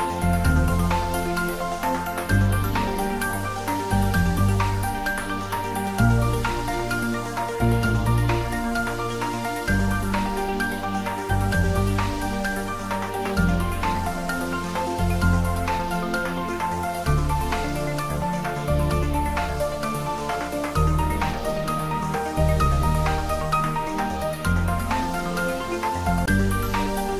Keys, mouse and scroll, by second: 0.6-1.6 scroll up 1, 2.6-12.3 drag, 18.9 Tab, 20.5 scroll up 1, 22.5-25.9 drag.